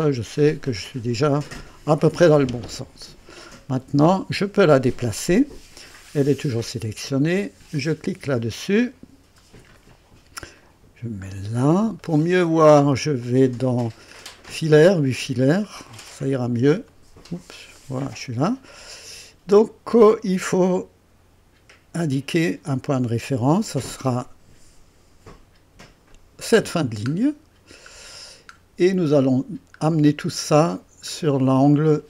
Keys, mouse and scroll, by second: 1.4 click, 7.7 click, 8.6-9.0 scroll up 2, 9.8 right click, 10.6 right click, 11.3-11.6 scroll up 2, 12.0 right click, 13.2 click, 14.4 click, 15.2-15.5 scroll up 2, 15.9 right click, 16.9 right click, 17.8 right click, 18.7-19.6 right drag, 21.4 scroll up 2, 21.9 right click, 26.1 click, 27.1-28.7 scroll down 6, 29.1 right click, 29.8-30.2 scroll up 2, 30.4 right click, 31.1 scroll up 2, 31.7 right click.